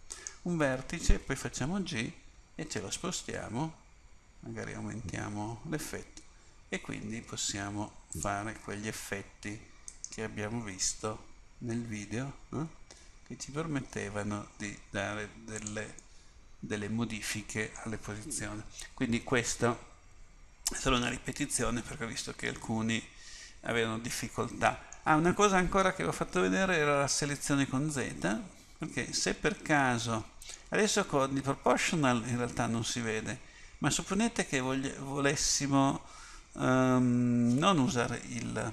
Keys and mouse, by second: 0.2-1.6 right drag, 1.6 g, 10.0 right click, 10.9 g, 16.3-23.7 middle drag.